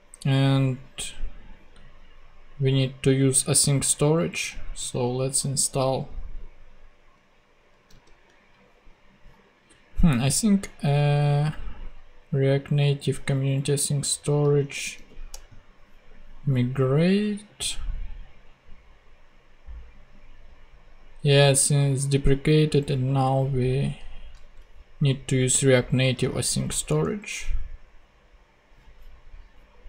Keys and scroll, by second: 7.9 super+c, 14.3 super+c, 14.6 super+t, 14.9 super+v, 15.3 super+Return, 16.1 Return, 24.4 super+c, 26.2 super+t, 26.8 super+Return, 27.7 Return.